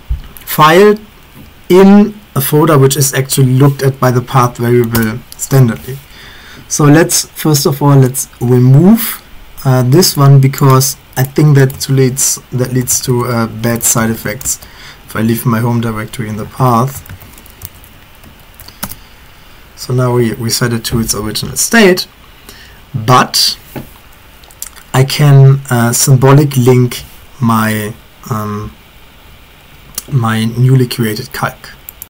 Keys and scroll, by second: 4.0 Up, 4.2 Up, 5.0 Return, 12.4-14.7 typing, 16.7-19.3 typing, 18.2 ctrl+v.